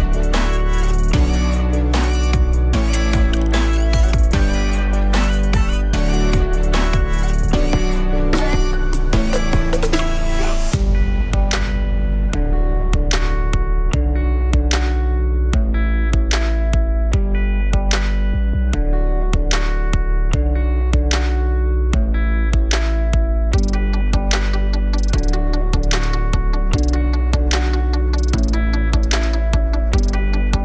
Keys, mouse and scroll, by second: 4.4 alt+m, 4.4 middle click, 5.0 e, 12.5 alt+m, 12.5 middle click, 16.5 alt+m, 16.5 middle click, 17.1 s, 21.7 alt+m, 21.7 middle click, 22.2 e, 27.3 g.